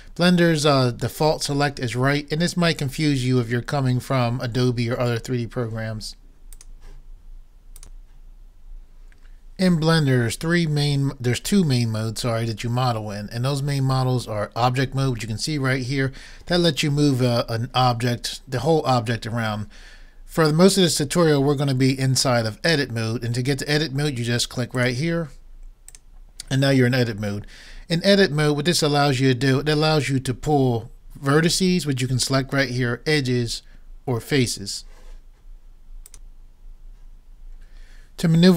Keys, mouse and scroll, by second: 26.0 click.